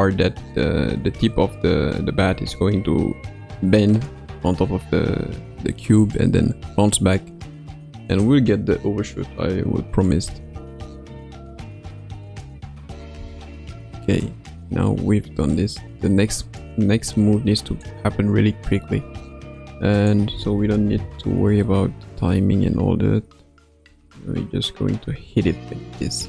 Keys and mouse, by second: 8.0 click, 10.2 space, 13.1 space, 14.2-17.8 drag, 19.9 click, 21.6 middle click, 23.8 r.